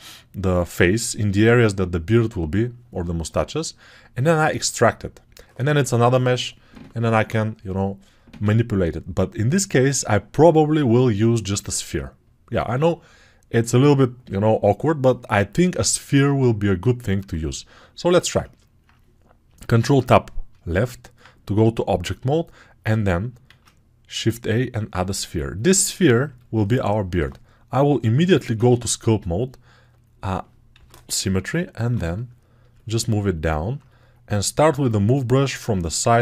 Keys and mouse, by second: 19.7 ctrl+Tab, 23.3 shift+a, 25.7 Tab, 28.3 ctrl+Tab, 30.6 g, 31.1 ], 31.6 ].